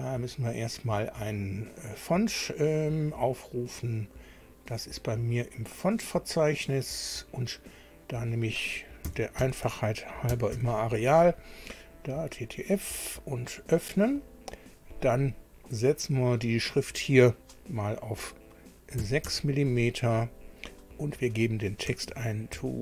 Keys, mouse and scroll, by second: 0.4 click, 3.3-3.9 scroll down 2, 4.2 scroll down 1, 5.2 scroll down 1, 6.5 click, 8.2 click, 8.8-11.0 typing, 12.1 click, 13.7 click, 15.9 click, 18.9 KP_6, 19.3 Tab, 21.0 click, 22.1-22.8 typing.